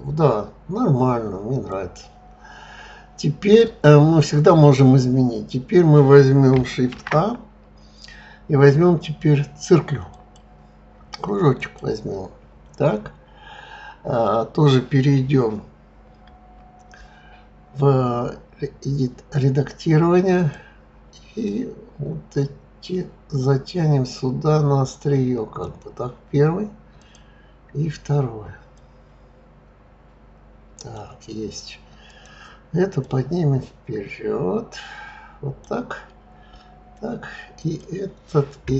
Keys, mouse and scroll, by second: 1.7 click, 6.9 shift+a, 11.6 click, 16.2 Tab, 20.4 click, 21.4 click, 27.0 click, 28.7 click, 32.1 click, 33.0 click, 37.6 click.